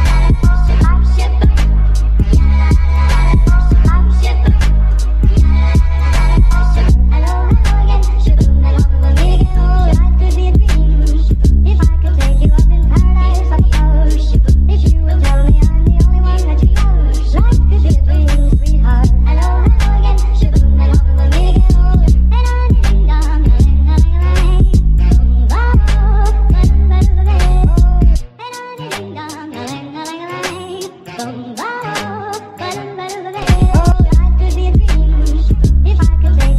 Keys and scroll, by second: 5.9 t, 7.3 p, 10.4 t, 36.2 ctrl+d.